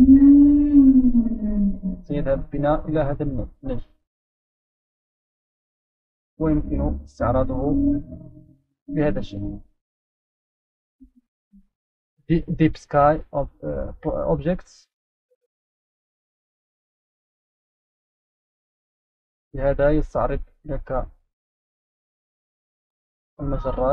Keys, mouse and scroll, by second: 3.1 right click, 3.4-4.9 scroll up 6, 5.4-7.3 right drag, 7.7 right click, 10.0 click, 14.9-15.7 right drag, 15.9-16.8 drag, 22.0-23.9 right drag.